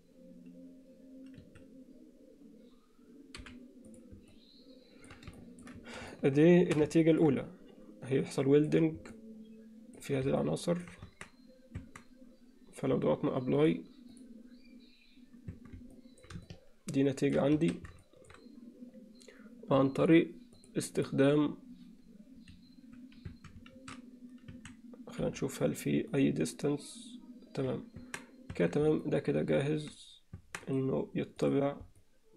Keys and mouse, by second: 3.4 h, 4.4-5.1 middle drag, 5.4 ctrl+alt+middle drag, 6.1-6.8 alt+shift+middle drag, 7.0 ctrl+alt+middle click, 7.4-8.7 middle drag, 9.2-10.0 middle drag, 10.4-10.9 middle drag, 11.1 Tab, 12.4 Tab, 13.6-14.8 drag, 15.7 Tab, 16.0 middle click, 16.5 ctrl+alt+middle click, 17.6 a, 18.0 shift+middle click, 20.6 click, 21.1-22.4 drag, 23.6 alt+a, 24.6 a, 25.2 m, 28.1 Tab, 28.7 Tab, 29.0 middle click, 30.4 Tab, 30.6-31.6 right drag, 32.0-32.3 alt+middle drag.